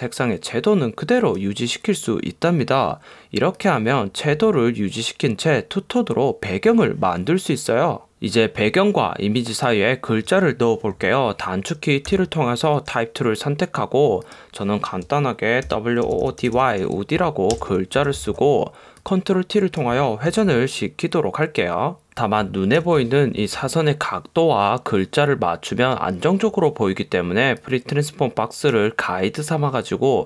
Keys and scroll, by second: 12.2 t, 15.5-18.1 typing, 17.7 super+Return, 20.4 super+t, 22.8 super+=.